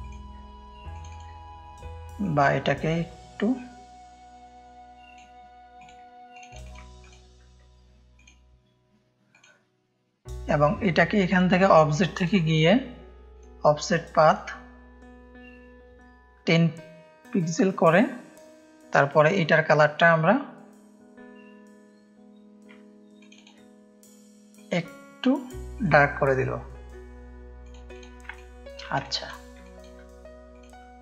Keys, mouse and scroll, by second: 0.9 click, 2.2-5.1 drag, 5.7 click, 6.4 click, 8.1 click, 9.3 click, 11.2-15.9 drag, 17.4-18.9 drag, 23.1 click, 24.5 click, 25.7-28.2 drag, 28.4 ctrl+space, 28.4 ctrl+click, 29.0 click, 29.0 space, 29.6 click, 29.7 space.